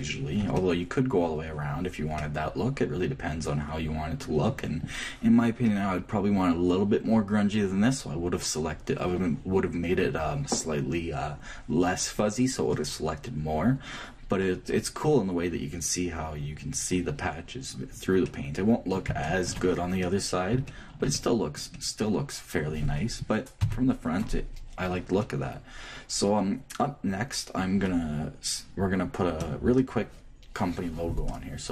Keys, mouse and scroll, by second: 4.8-11.4 middle drag, 13.7-16.7 scroll up 1, 17.3-18.0 scroll down 1, 18.0-23.3 middle drag, 18.8 Left, 24.9-26.1 middle drag, 26.2 middle click.